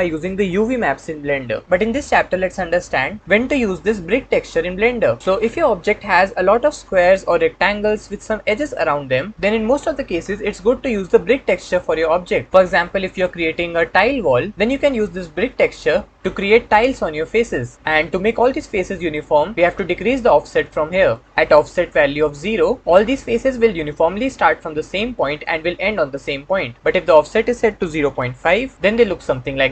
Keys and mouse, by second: 6.4-8.3 middle drag, 20.6 click, 27.1-28.3 drag.